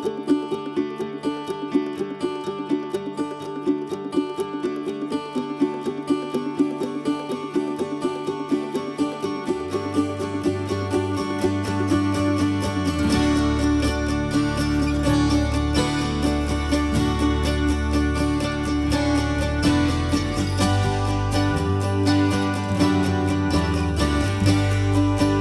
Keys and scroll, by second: 1.0 ctrl+c, 1.0 ctrl+v, 4.2 ctrl+c, 4.4 ctrl+v, 8.0 ctrl+c, 11.5 ctrl+s, 12.4 ctrl+v, 20.4 ctrl+c, 21.0 ctrl+v, 24.2 ctrl+z.